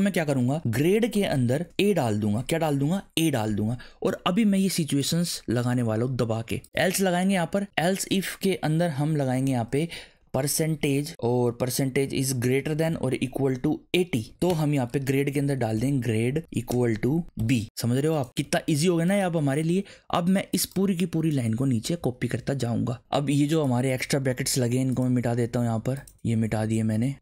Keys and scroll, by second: 0.3-2.6 typing, 6.4-8.3 typing, 9.3 shift+9, 10.1 p, 12.5-19.2 typing, 22.0 alt+shift+Down, 24.2 BackSpace, 25.1 BackSpace, 26.1 BackSpace, 26.3 BackSpace.